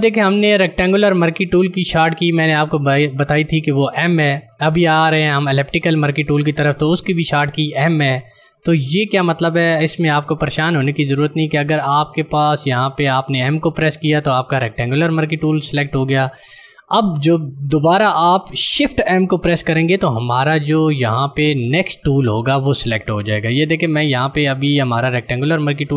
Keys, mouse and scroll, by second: 14.0 click, 21.4 click.